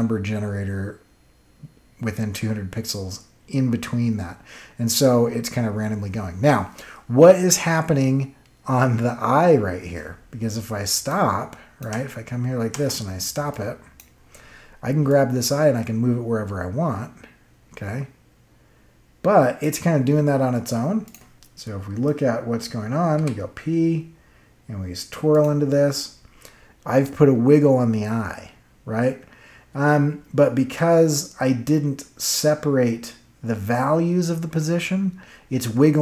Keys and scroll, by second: 11.8 space, 23.1 p.